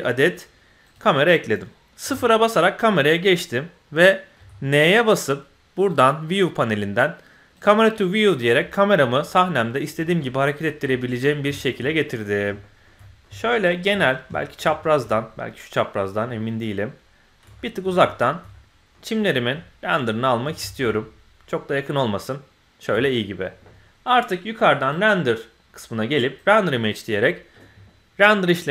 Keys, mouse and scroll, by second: 2.0 KP_0, 4.3 n, 5.7 click, 7.5 click, 8.1-8.9 scroll down 2, 8.4-8.9 middle drag, 9.0-9.7 scroll down 3, 9.7 click, 9.9 scroll down 2, 10.2-10.6 drag, 10.2 middle click, 10.6-11.4 scroll down 4, 11.5 shift+middle click, 11.8-12.5 middle drag, 12.6 shift+middle click, 13.0 middle click, 13.3 shift+middle click, 13.6 shift+middle click, 13.9 middle drag, 14.3 shift+middle click, 14.8 ctrl+shift+middle click, 15.1-16.1 middle drag, 16.2-17.4 ctrl+shift+middle drag, 17.5 shift+middle click, 18.1 ctrl+middle click, 18.5 middle click, 19.6 ctrl+middle click, 20.6 shift+middle click, 20.9-22.8 ctrl+middle drag, 24.8-28.7 drag.